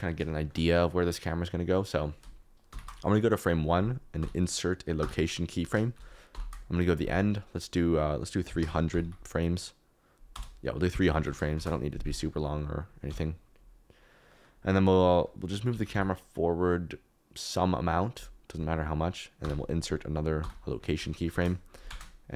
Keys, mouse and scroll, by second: 0.3 shift+right click, 2.7 shift+Left, 4.1 i, 6.3 shift+Right, 7.8-9.0 drag, 9.0 0, 11.5 shift+Right, 13.0 n, 15.7 g, 15.9 y, 19.4 i, 21.3 shift+Left, 21.8 space.